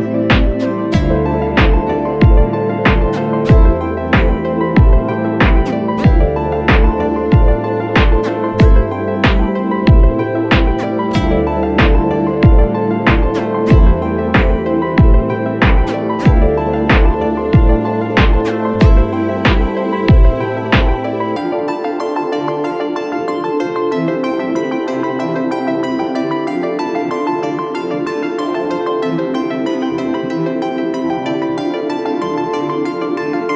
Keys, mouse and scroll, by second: 0.3 ctrl+z, 2.0 ctrl+z, 2.0 shift+click, 3.0 shift+click, 3.4 shift+Up, 5.2 Up, 5.4 Up, 7.2 Return, 9.5 ctrl+t, 10.4 alt+shift+click, 18.3 Return, 19.9 Left, 20.4 Left, 21.0 Down, 21.8 Down, 22.0 Down, 22.8 ctrl+h, 23.2 Up, 32.1 ctrl+t.